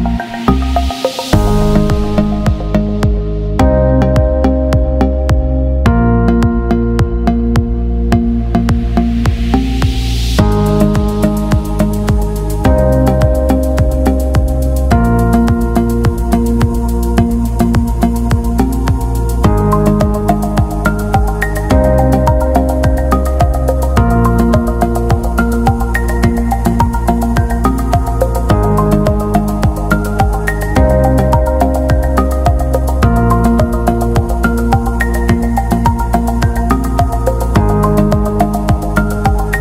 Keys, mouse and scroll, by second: 1.2 click, 7.5 click, 12.0 click, 13.4-14.1 alt+scroll down 1, 14.1 click, 18.6 ctrl+click, 20.8 ctrl+click, 23.8 click, 26.8-27.2 scroll up 1, 27.6 click, 32.0-32.6 alt+scroll down 1, 32.7 click, 33.6 b, 34.4 click, 38.4 scroll down 1, 39.4 click.